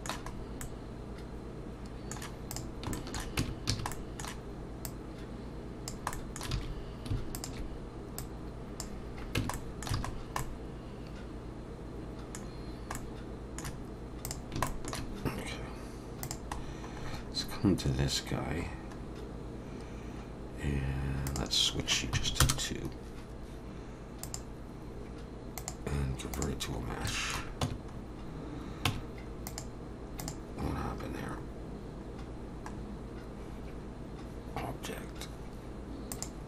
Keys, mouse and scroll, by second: 0.0 Tab, 0.0 alt+a, 0.0 middle click, 0.0-0.3 scroll down 1, 0.3 scroll up 2, 0.6 middle click, 2.5 click, 2.9 shift+middle click, 3.4 Tab, 3.7 a, 3.9 middle click, 4.9 click, 6.1 middle click, 6.5 alt+a, 7.3 alt+shift+click, 8.2 click, 9.4 Tab, 9.5 middle click, 10.0 alt+a, 10.1 scroll down 2, 10.4 middle click, 12.7-13.0 scroll down 1, 13.0 middle click, 14.3 click, 14.7 shift+middle click, 16.2 click, 16.6-17.5 scroll down 10, 18.4-19.0 scroll up 1, 19.4-20.2 scroll up 4, 20.4-21.3 scroll down 1, 21.3 click, 24.2 click, 26.8 scroll up 3, 27.1 shift+middle click, 27.6 Tab, 27.9 scroll up 1, 28.9 Tab, 29.5 click, 30.7 click, 31.4-32.3 scroll up 4, 32.3-32.7 scroll down 2, 32.7-33.9 scroll up 2, 36.1 click.